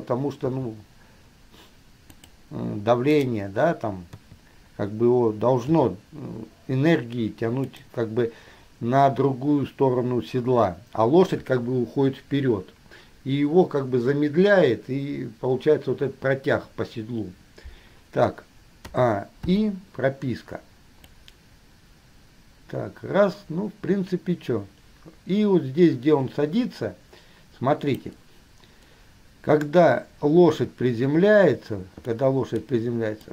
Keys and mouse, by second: 0.7 r, 3.3 click, 4.3 KP_3, 5.9 r, 19.1 a, 19.7 i, 21.3-28.3 drag, 32.3-32.9 middle drag.